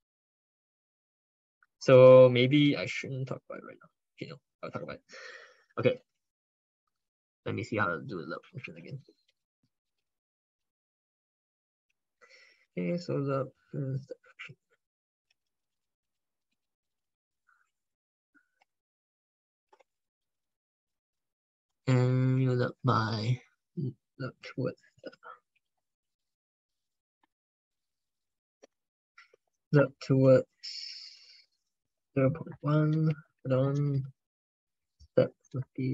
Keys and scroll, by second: 6.0 alt+Tab, 9.2 ctrl+f, 15.2 ctrl+c, 16.4 alt+Tab, 19.5 ctrl+v, 20.0 ctrl+Left, 20.3 ctrl+Left, 20.5 ctrl+Left, 20.7 ctrl+Left, 21.8 alt+Tab, 24.9 alt+Tab, 25.9 ctrl+Right, 26.1 ctrl+Right, 26.3 ctrl+Right, 26.5 ctrl+Right, 27.1 ctrl+BackSpace, 28.8 ctrl+Left, 29.2 ctrl+Right, 33.5 ctrl+Left, 35.3 ctrl+BackSpace, 35.5 ctrl+BackSpace, 35.8 ctrl+BackSpace.